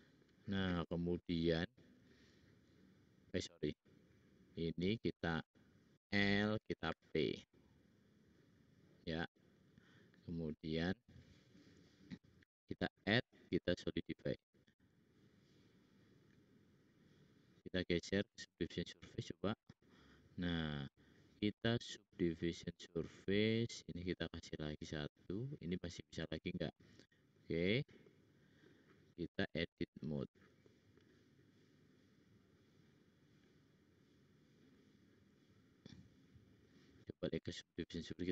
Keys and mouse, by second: 5.9 l, 6.8 p, 10.4-11.6 drag, 12.7-14.1 drag, 12.7-14.1 middle drag, 12.7-14.1 right drag, 24.1-25.6 drag, 24.1-25.6 middle drag, 24.1-25.6 right drag, 34.5 click, 36.0 click, 36.6 click, 37.7 middle click.